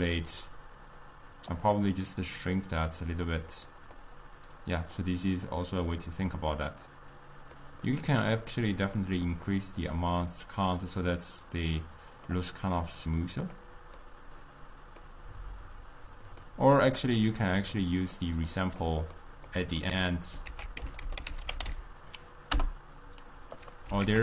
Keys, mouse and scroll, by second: 0.6-4.1 drag, 4.1-9.9 middle drag, 9.9-13.0 drag, 13.7-20.5 middle drag, 20.5 ctrl+a, 24.1 ctrl+a.